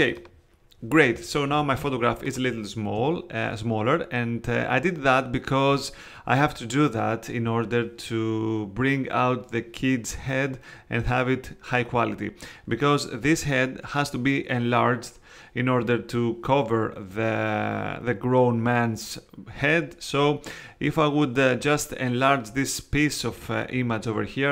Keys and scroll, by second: 1.5 space.